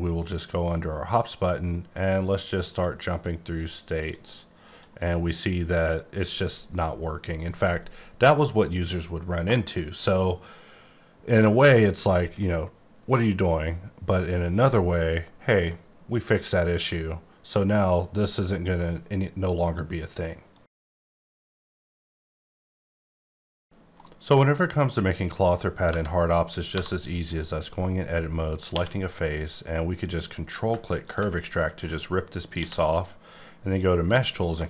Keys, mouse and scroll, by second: 2.0 click, 2.3 click, 2.7 click, 3.1 click, 3.6 click, 4.0 click, 4.2 double click, 4.6 click, 5.0 double click, 25.0 scroll up 1, 25.8 Tab, 26.7 3, 27.2 click, 28.7 q, 31.0 ctrl+click, 31.6 middle click, 32.6 q, 34.3 ctrl+click.